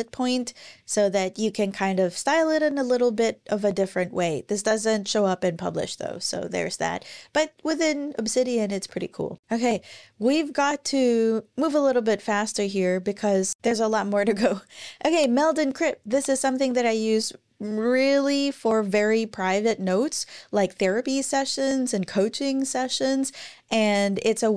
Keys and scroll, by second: 8.7 super+w.